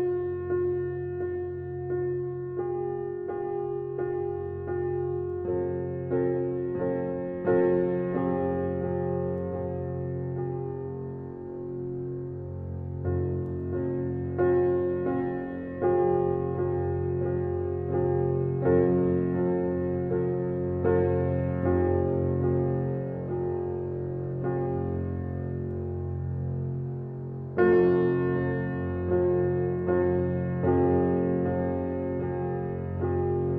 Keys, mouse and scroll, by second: 0.7 alt+middle click, 2.0-3.6 drag, 3.6 alt+right click, 4.5-7.0 drag, 7.0 e, 7.8 click, 8.4 w, 9.0-10.6 drag, 10.6-12.2 alt+drag, 12.2 r, 12.6-15.1 drag, 15.1 w, 15.8 alt+click, 17.9 e, 19.0-21.1 drag, 21.1 w, 21.4-26.7 alt+drag, 27.5 alt+right click, 27.8 alt+click, 29.1 alt+right click, 29.5 alt+click, 29.9 alt+middle click, 30.5 click, 32.8 alt+right click, 33.2 alt+click.